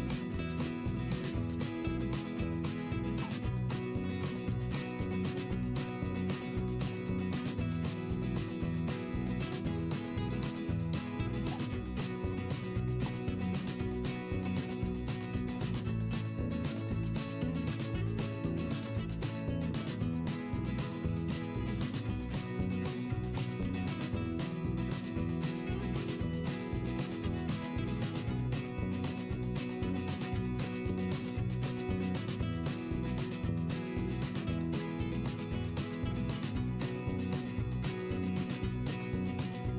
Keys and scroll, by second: 8.1 v, 11.0 p, 11.5 v, 12.0 Delete, 17.2 v, 18.6 ctrl+z, 21.3 p, 33.8 v, 39.1 v.